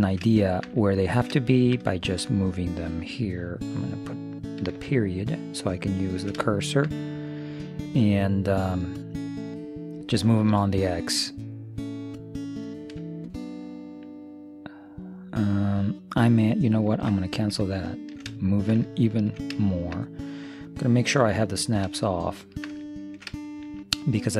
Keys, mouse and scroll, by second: 4.8 ., 5.4-7.1 drag, 6.2-8.3 middle drag, 11.1-12.9 drag, 17.7-21.7 middle drag, 22.0-24.3 middle drag.